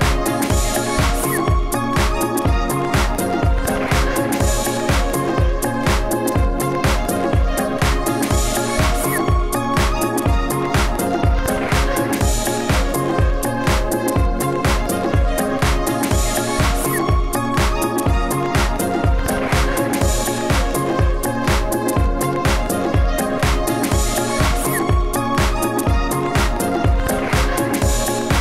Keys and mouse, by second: 6.3-11.9 typing, 13.3 Tab, 13.5 Tab, 15.0 Tab, 15.1 Tab, 16.5 Tab, 16.8 Tab, 17.5-21.7 typing, 19.4-19.8 drag, 23.5 s, 23.5 f, 24.9 f.